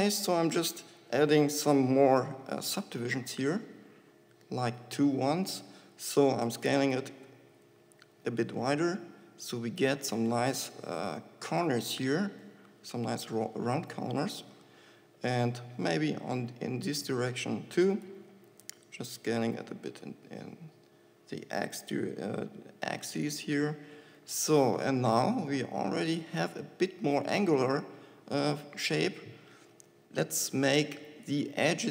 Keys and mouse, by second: 0.0 Tab, 1.3 ctrl+r, 6.0-7.7 drag, 6.9 s, 7.7-9.6 middle drag, 11.4-13.0 drag, 13.3 ctrl+r, 17.5 click, 18.1 s, 22.1-23.7 middle drag, 23.7-24.8 drag, 25.8 Tab, 31.3 Tab.